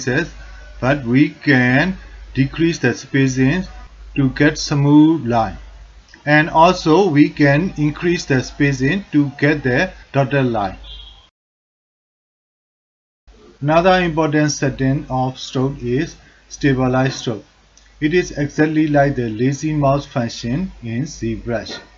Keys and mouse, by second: 1.1 alt+click, 3.0-4.9 drag, 5.4 click, 6.3-7.7 drag, 8.0 ctrl+alt+middle click, 8.5 shift+middle click, 8.9 ctrl+alt+middle click, 9.4 alt+shift+middle click, 10.3 middle click, 11.3 middle click, 12.1 alt+shift+click, 12.6 click, 17.2 click, 18.0-19.4 alt+drag, 18.2 f.